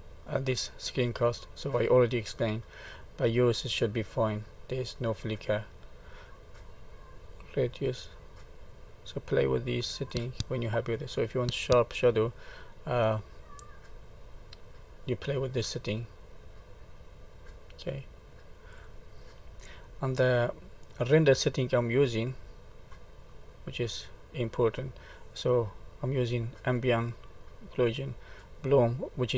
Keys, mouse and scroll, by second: 3.3 middle click, 5.8 scroll up 2, 7.7 click, 12.9 click, 20.0 middle click, 23.5 click.